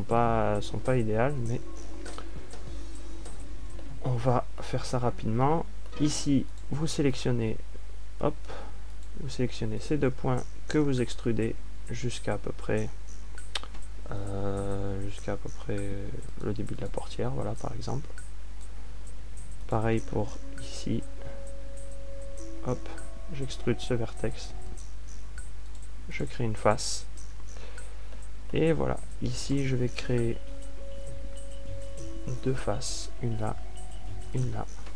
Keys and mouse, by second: 0.6 f, 3.7 ctrl+alt+q, 4.8 ctrl+alt+q, 9.8 a, 12.4 e, 19.1-24.4 drag, 24.5 e, 27.8-28.9 drag, 28.9 f, 32.1 click, 32.8 e.